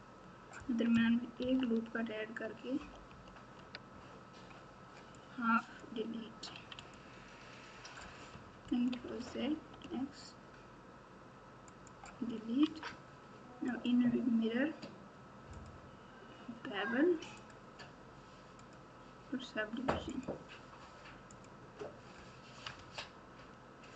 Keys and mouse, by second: 1.3 ctrl+r, 5.3 click, 6.5 x, 8.9 ctrl+z, 9.8 x, 12.6 Tab, 13.6-18.7 drag, 20.1-21.4 drag, 22.6 Tab.